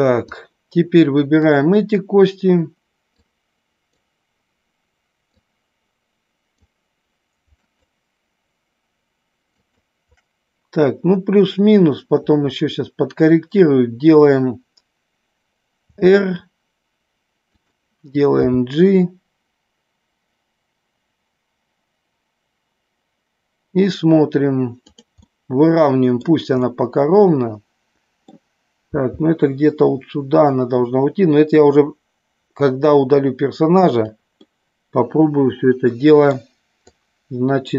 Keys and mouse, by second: 0.3-1.4 drag, 3.2-4.0 drag, 5.4-6.6 drag, 7.6-8.7 shift+drag, 9.6-10.7 shift+drag, 15.8 r, 18.4 g, 25.3 middle click, 26.6-28.2 middle drag, 28.9 g, 34.4-36.2 middle drag, 36.8-37.7 drag.